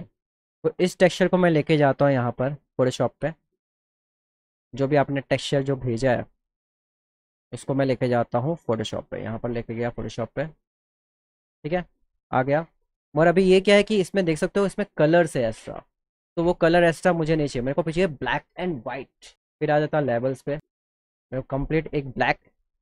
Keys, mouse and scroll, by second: 0.6 click, 2.4 click, 3.0 click, 8.6 click, 9.7 click, 12.5 ctrl+=, 12.8 ctrl+=, 13.3 ctrl+=, 13.8 ctrl+-, 14.0 =, 15.7 ctrl+=, 16.5 ctrl+-, 16.7 ctrl+-, 17.3 ctrl+-, 20.8 ctrl+-, 21.0 ctrl+-, 21.4 ctrl+-, 21.8 ctrl+=, 22.0 ctrl+=, 22.2 ctrl+=, 22.5 ctrl+=.